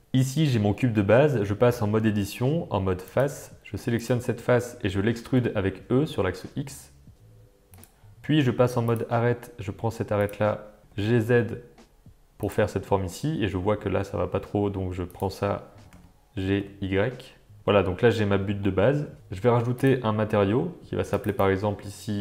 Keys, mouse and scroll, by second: 1.7 Tab, 3.1 click, 5.3 e, 8.9 click, 10.8 g, 15.1 click, 15.8 g, 17.5 Tab, 17.6-18.7 middle drag, 21.1 click, 21.3-22.2 drag.